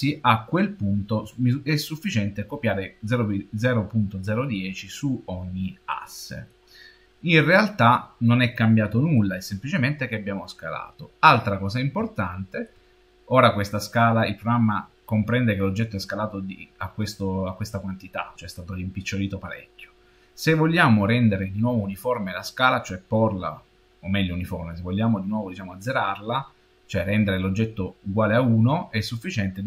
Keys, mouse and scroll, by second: 5.7 middle click, 6.7-7.4 scroll up 11, 9.1 shift+middle click, 10.2-10.5 scroll up 6, 11.4 scroll up 2, 12.0 shift+middle click.